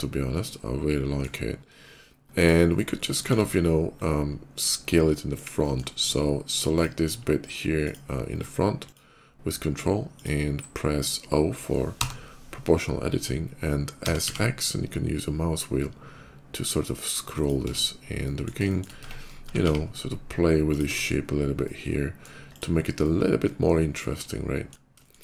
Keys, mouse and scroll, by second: 2.2 click, 2.4-2.8 scroll up 1, 2.8 middle click, 3.1 Tab, 4.8 middle click, 5.3 middle click, 6.4 click, 7.5 ctrl+click, 8.5 ctrl+click, 10.0 ctrl+click, 11.6 o, 13.6 s, 14.0 x, 14.2 s, 15.8 middle click, 17.2 click, 17.5 Tab, 18.0 middle click, 18.5 shift+middle click, 18.7 Tab, 19.3 s, 19.4 x, 20.5 click, 20.7 Tab, 21.4 middle click, 22.2 click, 22.7-24.5 middle drag, 24.9 shift+middle click.